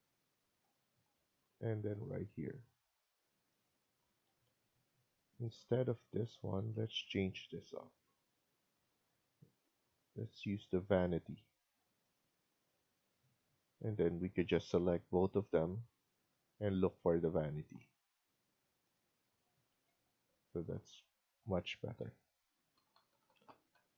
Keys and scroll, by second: 0.0-0.1 typing, 3.9 Escape, 4.2 Escape, 6.5 Escape, 6.8 Escape, 13.5 Escape, 13.7 Escape, 19.6 Escape, 19.8 Escape, 22.3-23.8 Up, 23.8 Right.